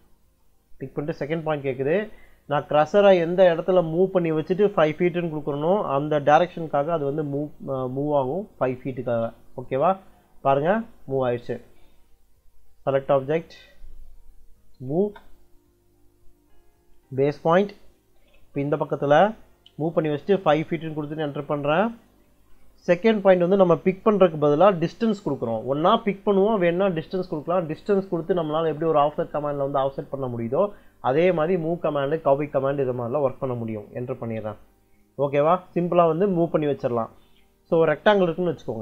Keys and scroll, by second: 6.2 5, 6.9 ', 8.9 Return, 14.6 m, 14.9 space, 20.5 5, 20.9 ', 34.1 Return, 37.7-38.8 typing.